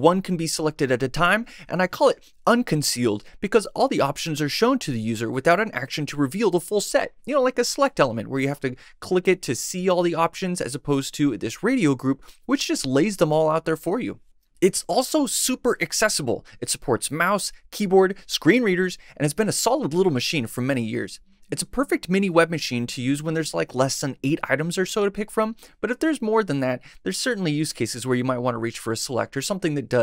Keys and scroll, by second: 0.1 Left, 0.9 Right, 16.9 Tab, 17.4 Right, 23.9 Tab, 24.4 Right.